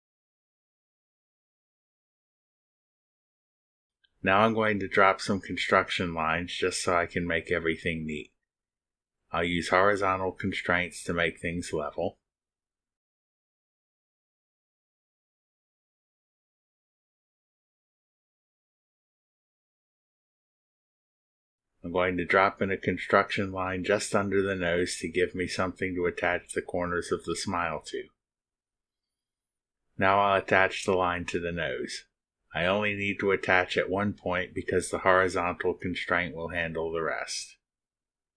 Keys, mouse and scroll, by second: 1.0 click, 3.0 scroll up 2, 5.2 click, 6.1 click, 6.8 click, 8.1 click, 8.7 click, 10.0 click, 10.8 click, 11.8 click, 12.9 right click, 14.1 click, 15.0 click, 17.4 click, 17.9 click, 18.7 click, 20.9 middle click, 22.8 click, 25.5 click, 27.6 click, 28.6 right click, 31.9 click, 33.3 click, 36.3 click.